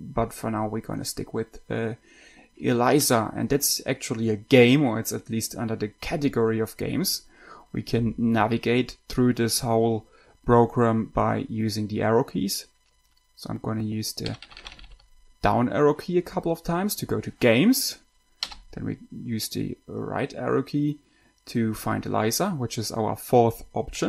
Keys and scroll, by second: 14.3 Down, 14.8 Down, 14.9 Down, 15.0 Down, 15.2 Down, 18.8 Right.